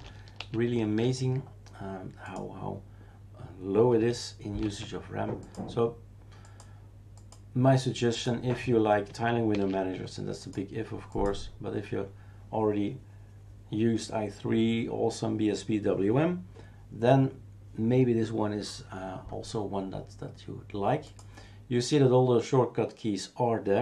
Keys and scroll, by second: 0.4 shift+super+q, 4.6 shift+super+q, 9.5 shift+super+q.